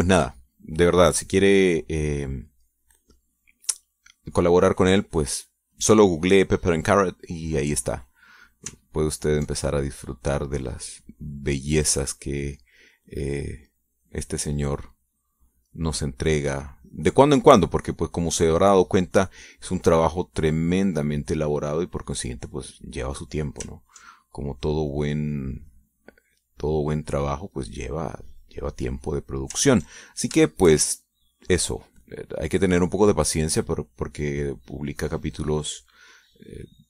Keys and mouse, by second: 1.0-3.2 drag, 3.5 click, 5.6 click, 10.0 ctrl+click, 10.7-13.5 drag, 13.6-17.9 drag, 18.1-24.0 drag, 24.6 ctrl+click, 25.2-29.8 drag, 30.3 ctrl+click, 31.6-34.9 shift+drag, 35.1-36.8 drag.